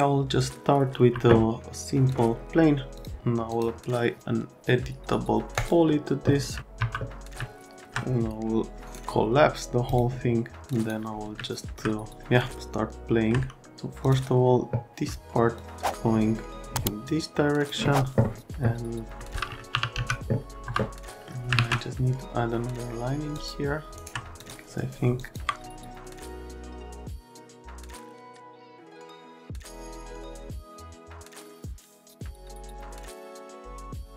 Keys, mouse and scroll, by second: 1.1 F3, 2.1 click, 3.5 click, 5.6 click, 6.8 F3, 7.4 alt+middle click, 12.6 alt+middle click, 14.0 click, 15.5 shift+click, 19.7 t, 20.0 z, 20.6 F3, 21.6 alt+`, 23.3 click, 24.4 click, 25.2 click, 26.1 click, 27.2 F3, 27.9 F3, 28.5 click, 28.8 click, 29.2 click, 30.5 alt+x, 30.8 e, 31.0 F3, 31.2 middle click, 31.5 F3, 31.6 F3, 31.7 middle click, 32.0 alt+`, 32.4 click, 32.6 right click, 32.7 middle click, 33.2 click, 33.5 click, 33.7 right click, 33.8 F3.